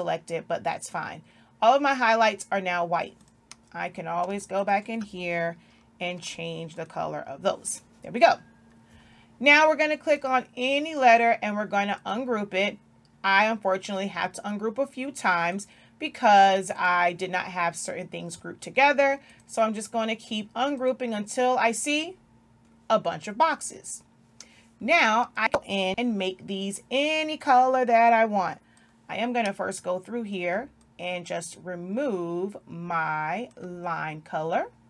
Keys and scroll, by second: 6.1 i.